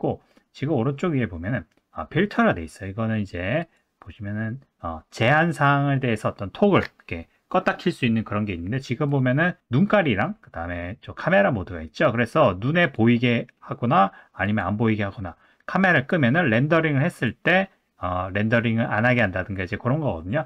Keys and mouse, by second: 3.7-9.1 drag, 12.8 click, 14.4 click, 15.9 click, 17.2 click.